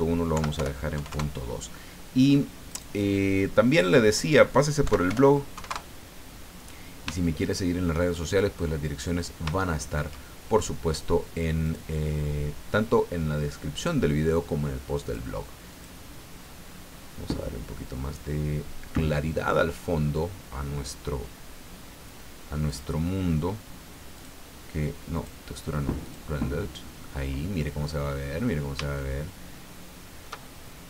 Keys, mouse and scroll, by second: 0.3 End, 0.6 BackSpace, 1.0 KP_2, 1.1 KP_Enter, 2.7 right click, 4.0 click, 4.8 End, 5.1 BackSpace, 5.6 KP_2, 5.7 KP_Enter, 6.8-7.2 scroll down 3, 7.2 shift+middle click, 8.9 middle click, 9.7 shift+middle click, 11.6 click, 15.0 click, 15.7 click, 16.4-17.0 scroll up 1, 17.3 scroll up 1, 18.7-19.2 scroll up 2, 22.6 click, 24.1 click, 25.1 click, 26.0 click, 27.4-27.9 scroll up 1, 29.0-30.4 shift+middle drag.